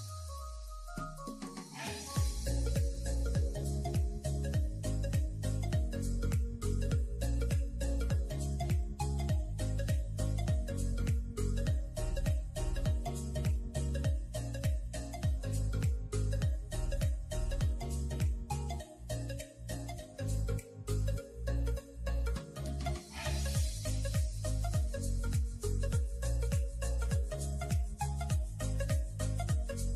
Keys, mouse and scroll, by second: 0.0 k, 1.1 k, 2.5 scroll down 2, 2.6 middle click, 3.5 ctrl+r, 4.8 ctrl+r, 7.5 scroll down 4, 7.7 middle click, 7.9 Tab, 8.1 click, 8.4 middle click, 8.6-8.9 scroll up 5, 8.9 middle click, 9.2 scroll down 3, 9.4-12.1 middle drag, 12.3 KP_3, 13.4 shift+a, 19.2 Tab, 19.7 r, 21.7 s, 23.1 g, 24.6 shift+middle click, 24.7-25.1 scroll up 2, 25.1-26.7 shift+middle drag, 27.6 Tab, 27.8 click, 28.2 Tab, 28.4-28.7 scroll up 3, 28.7 shift+middle click, 29.0 scroll up 1, 29.2 2.